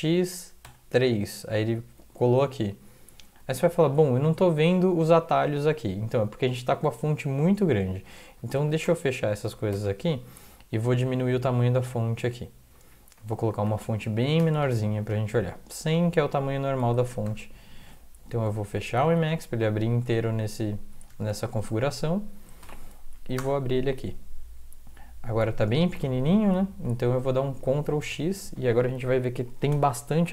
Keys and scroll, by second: 0.6 3, 8.6 ctrl+x, 8.9 0, 9.4 ctrl+x, 9.7 0, 10.4 Up, 10.9 Up, 11.1-11.8 Up, 12.1-12.7 Down, 13.2 Up, 13.4 End, 13.7 Left, 13.8 Left, 14.0 Left, 14.4 BackSpace, 14.5 1, 16.9 ctrl+x, 17.3 ctrl+s, 19.1 alt+F4, 20.2 alt+Tab, 20.9 alt+Tab, 21.1 alt+Tab, 21.3 alt+Tab, 22.6 ctrl+l, 23.0 Up, 23.4 Return, 26.5 super+Up, 28.0 ctrl+x.